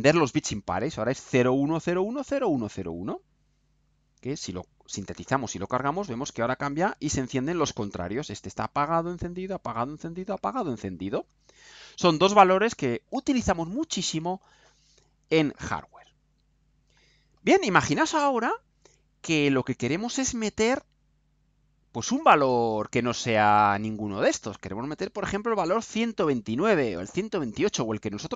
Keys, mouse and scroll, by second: 3.8 ctrl+u, 20.2 right click, 21.1 scroll down 2.